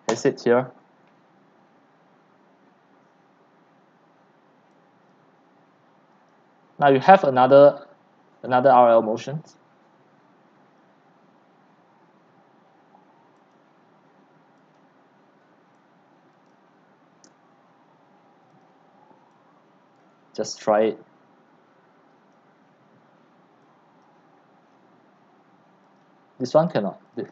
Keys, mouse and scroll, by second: 0.1 Return, 4.7-5.2 scroll down 1, 6.6-11.4 drag, 13.5-23.9 drag, 24.0 click, 24.7-26.0 scroll down 6, 26.0-27.3 drag.